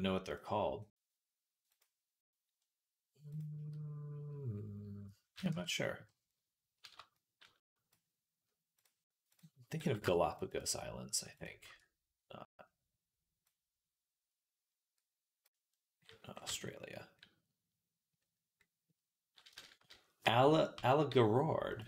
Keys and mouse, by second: 0.1-1.6 drag, 1.6-3.2 middle drag, 3.2-21.6 drag, 5.3 Tab, 6.8 a, 16.3 Tab, 20.6 Tab, 21.6 middle click.